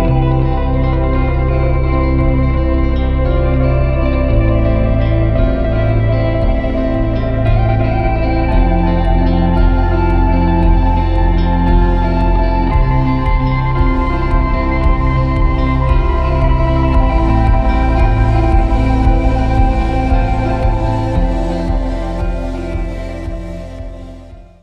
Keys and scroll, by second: 1.3 /, 2.3 `, 2.5 `, 14.3 Tab, 14.5 a, 16.3 /, 19.1 `.